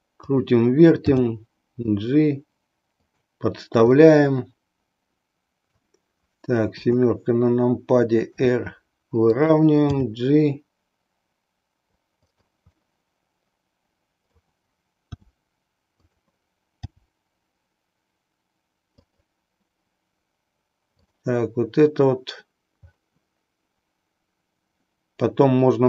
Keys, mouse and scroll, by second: 1.2 g, 3.2 click, 4.0-5.9 middle drag, 6.8 KP_7, 8.4 r, 9.4 click, 9.9 g, 12.3 click, 12.8-14.4 middle drag, 15.1 r, 16.8 g, 19.1 click, 20.9 click.